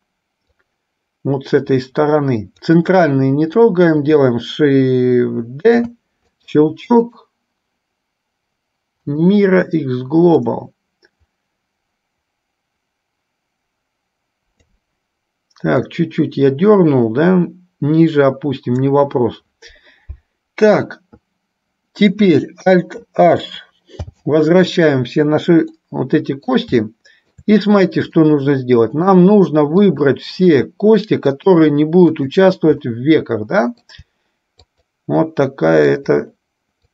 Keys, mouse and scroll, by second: 0.6-2.9 drag, 5.8 shift+d, 7.1-9.3 right drag, 10.5-14.8 drag, 16.0 click, 16.3-18.9 drag, 24.1 alt+h, 26.0 middle click, 27.0 shift+middle click, 28.5 middle click, 30.1 click, 33.4 middle click, 34.8-35.8 shift+drag, 36.1 shift+click.